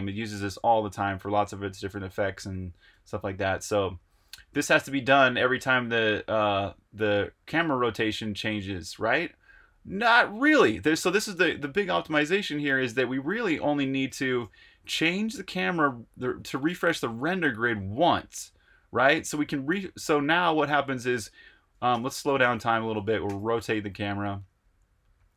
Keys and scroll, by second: 0.0-0.9 typing, 2.8 Escape, 3.0 j, 4.0-4.7 typing, 10.7-11.8 typing, 14.0 super+r, 14.1 Escape, 14.3-15.4 typing, 21.9-23.2 typing.